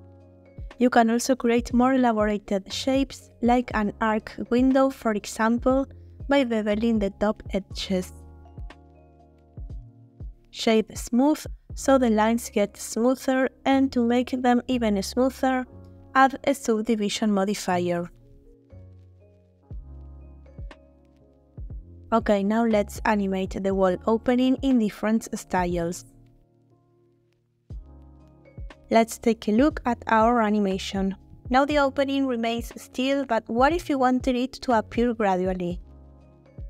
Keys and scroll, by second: 0.7 Tab, 2.9 2, 5.6 ctrl+shift+b, 8.5 h, 29.8 space, 35.2 space.